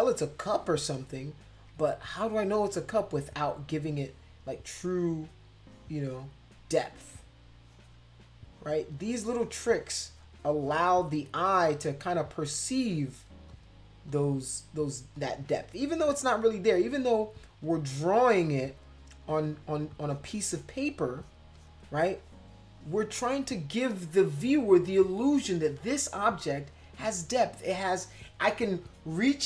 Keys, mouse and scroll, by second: 0.1 click, 0.7 space, 0.9 click, 3.9 click, 4.7 click, 5.6 click, 6.9 click, 7.5 click, 8.4 click, 9.3 click, 9.7 click, 10.1 click, 10.3 click, 12.2 click, 12.5 click, 13.1 click, 13.5 click, 14.1 click, 14.8 click, 15.2 click, 15.6 click, 16.0 click, 16.8 click, 17.0 click, 17.3 click, 17.6 click, 17.9 click, 18.2 click, 18.7 click, 20.0 click, 20.7 click, 21.2 click, 21.6 click, 22.2 click, 22.8 click, 23.1 click.